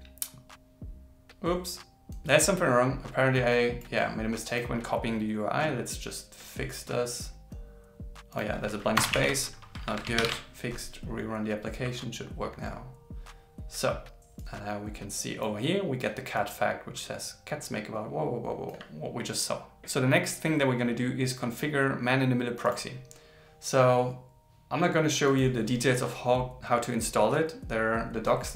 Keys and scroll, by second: 9.6 super+s, 10.2 ctrl+shift+r.